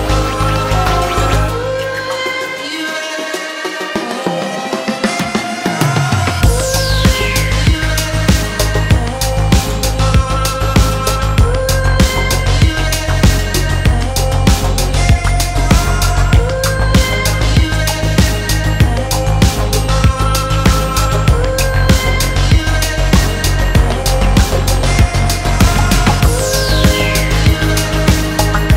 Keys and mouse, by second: 0.1-0.4 ctrl+drag, 0.6 click, 2.3 ctrl+j, 3.3 click, 3.8-4.3 drag, 4.7-5.5 drag, 6.1 Tab, 6.6 shift+click, 7.2 2, 7.5 alt+click, 9.7 click, 11.1 1, 15.0 shift+click, 17.3-18.5 drag, 19.2 s, 21.3 click, 21.6 s.